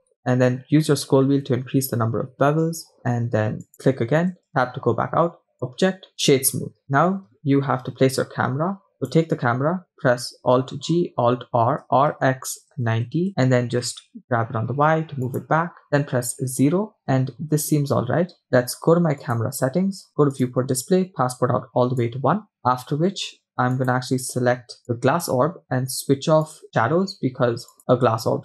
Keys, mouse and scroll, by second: 4.5 Tab, 5.5 click, 8.2-8.9 scroll down 1, 8.9 scroll down 1, 9.0 click, 10.6 alt+g, 11.5 alt+r, 13.6 g, 16.0 KP_0, 17.0-17.4 scroll up 3, 17.4-17.8 scroll down 2, 19.2 click, 20.3 click, 20.6-20.9 scroll down 2, 21.4 click, 23.8 click, 24.8 click, 26.4 click, 26.6-27.3 scroll down 2, 27.7-28.4 drag.